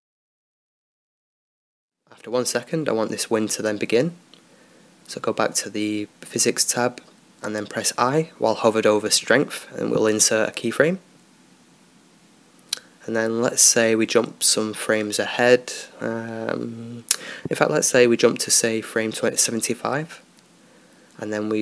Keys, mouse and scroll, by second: 2.8-4.8 right drag, 4.8-7.1 middle drag, 7.1-8.8 drag, 12.2 i, 15.4-17.0 drag, 19.8-21.3 drag.